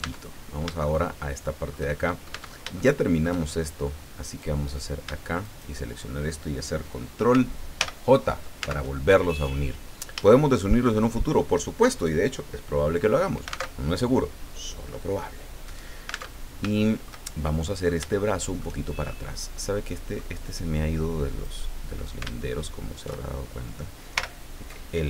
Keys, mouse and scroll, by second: 0.0 Tab, 0.8-1.9 shift+middle drag, 2.6 shift+Tab, 2.7 shift+middle click, 4.2 right click, 5.4 shift+right click, 7.8 ctrl+j, 8.6 ctrl+Tab, 9.5 scroll down 2, 10.3 shift+click, 13.7 alt+Tab, 16.3 alt+Tab, 16.8-18.0 shift+middle drag, 18.1 shift+middle click, 19.1-20.4 shift+middle drag, 21.4 right click, 24.2 l.